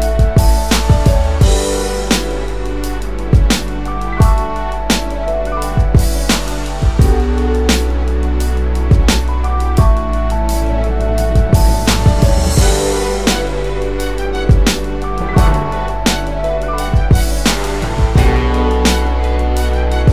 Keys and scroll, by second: 8.8 space.